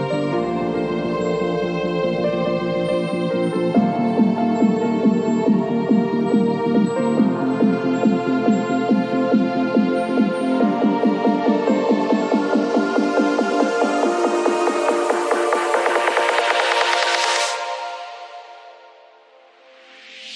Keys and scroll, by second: 3.4 v, 6.9 ctrl+a, 7.1 ctrl+c, 7.3 ctrl+w, 7.6 ctrl+v, 10.9 ctrl+t.